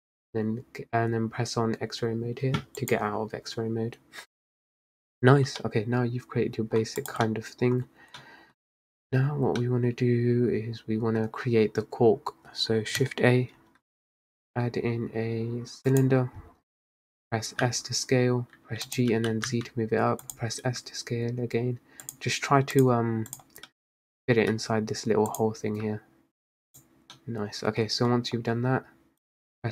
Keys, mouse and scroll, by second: 2.9-5.7 drag, 5.7-6.9 middle drag, 6.9 scroll down 2, 7.1 click, 7.3-9.1 middle drag, 9.1-9.6 scroll up 1, 9.6 scroll down 1, 9.7-11.4 middle drag, 11.4-12.5 scroll down 2, 13.7 shift+a, 17.7 s, 19.2 g, 20.7 s, 22.8-23.8 drag, 23.8 middle drag, 24.1-24.6 scroll down 2, 24.6 s, 25.8 s, 27.2-27.9 middle drag, 27.9 scroll down 1, 28.2 Tab, 29.4-29.7 drag.